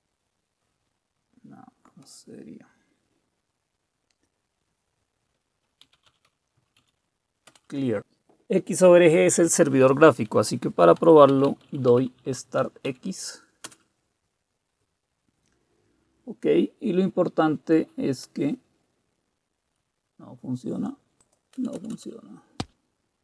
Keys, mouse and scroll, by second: 5.7-7.3 typing, 7.5 Return, 11.0-12.8 typing, 13.6 Return, 19.7 Return, 19.7-23.2 drag, 21.5 Return, 21.8 Return, 21.9 Return.